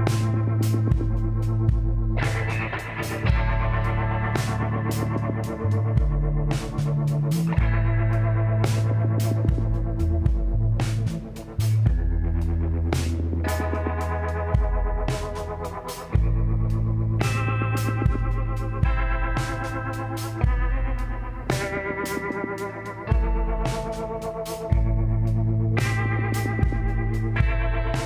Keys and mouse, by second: 1.9 click, 2.8 click, 4.2-7.5 middle drag, 4.4 a, 11.7-13.4 middle drag, 14.3-20.0 middle drag, 22.1-23.7 drag, 23.0 l, 23.7 l, 24.9 KP_1, 25.3 click, 26.7 shift+d.